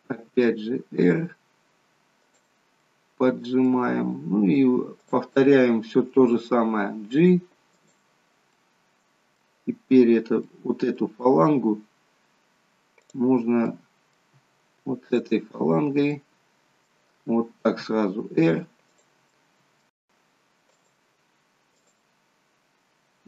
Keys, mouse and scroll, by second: 0.6 r, 2.9 middle click, 5.0 click, 6.4 g, 8.6 middle click, 10.6 middle click, 11.4-11.7 scroll up 4, 11.8 scroll down 2, 13.2 click, 13.8 middle click, 15.1 shift+click, 15.7 scroll down 2, 16.3 middle click, 17.8 r, 19.3 middle click, 20.7 click, 21.7 click.